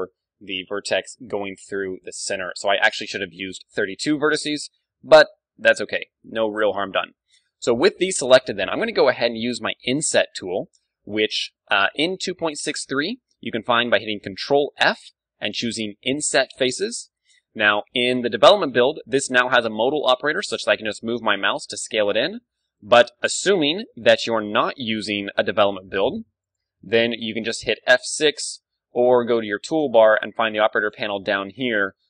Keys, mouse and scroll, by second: 0.3 ctrl+d, 0.7-3.7 drag, 1.7 ctrl+d, 3.6 middle click, 3.7-6.7 middle drag, 7.2-11.0 middle drag, 11.7-14.8 middle drag, 14.3 ctrl+f, 22.9-24.8 right drag, 24.9 ctrl+f, 26.5-28.3 drag, 27.8 F6, 29.3 t, 29.8 middle click, 31.6-32.0 drag.